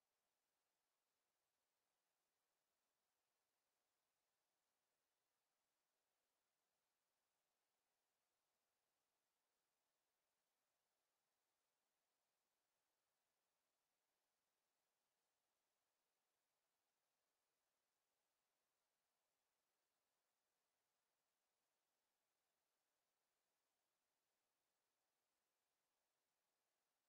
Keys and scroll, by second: 24.1 Escape.